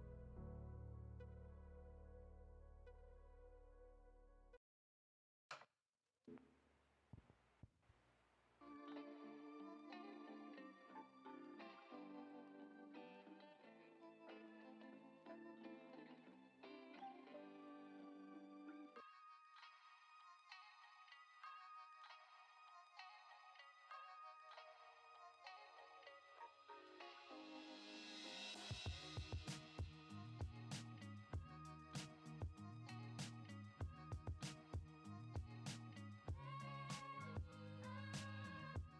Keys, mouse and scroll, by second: 6.5-7.6 drag, 8.6-9.8 drag, 10.5 middle drag, 11.1 shift+a, 17.9-19.0 drag, 20.0-23.5 drag, 24.9-26.3 drag, 30.9-31.4 middle drag, 32.1 ctrl+s, 33.7 F6, 34.0 shift+a.